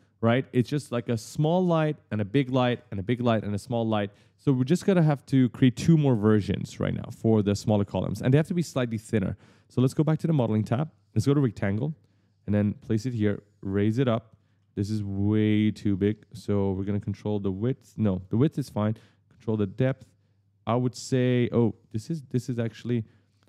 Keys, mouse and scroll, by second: 1.8 middle click, 2.6 middle click, 3.1 middle click, 3.7 middle click, 4.1 middle click, 6.0 right click, 6.6-8.2 typing, 8.9 click, 9.9 click, 11.2 click, 12.3 click, 14.2 right click, 17.0 click, 18.9 click, 21.8 click.